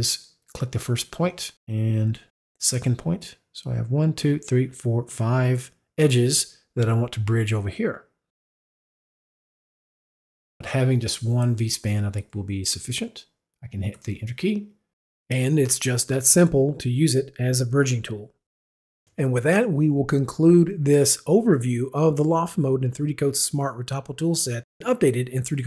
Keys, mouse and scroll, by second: 0.4 click, 2.2 click, 9.8 click, 13.9 Return, 19.0 click, 20.4 click, 22.3 click, 22.7 Return, 23.9 click, 25.3 click.